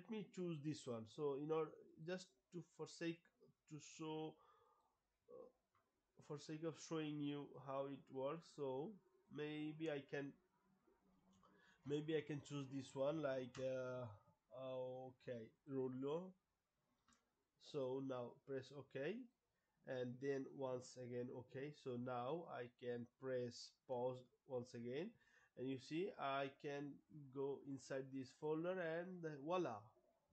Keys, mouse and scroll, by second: 2.0 click, 3.1 right click, 4.7 click, 7.5 click, 9.2 click, 14.0 scroll, 15.6 click, 17.8 click, 19.3 click, 20.6 click, 23.9 Pause, 25.9 click, 26.2 click, 28.2 click, 28.4 click.